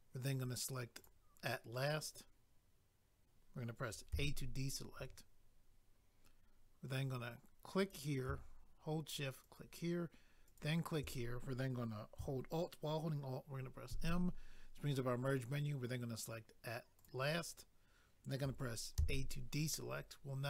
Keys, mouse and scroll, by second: 1.0 click, 7.8 click, 9.4 shift+click, 10.5 shift+click, 13.9 alt+m, 17.0 click, 17.1 click.